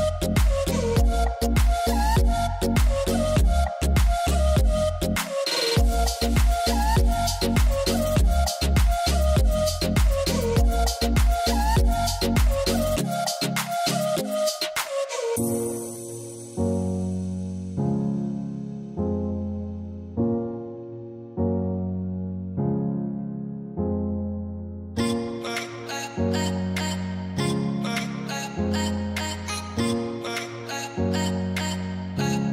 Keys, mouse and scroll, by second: 4.8-17.3 drag, 25.1 f, 28.0 click.